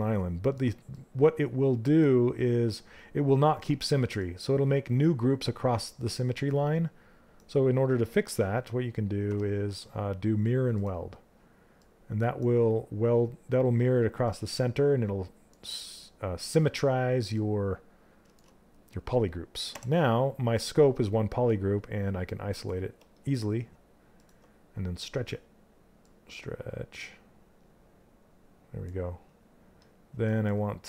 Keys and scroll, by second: 19.3 w.